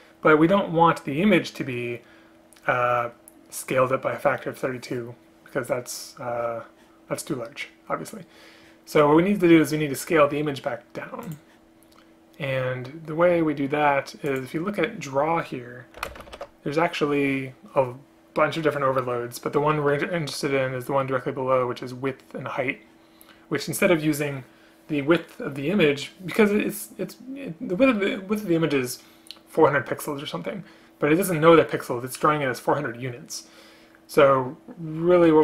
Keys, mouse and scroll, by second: 16.2 space, 16.4 ctrl+p.